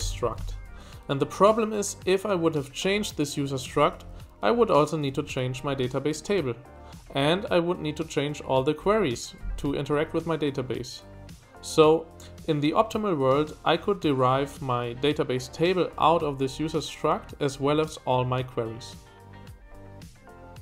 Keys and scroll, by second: 0.0-0.9 typing, 4.0 typing.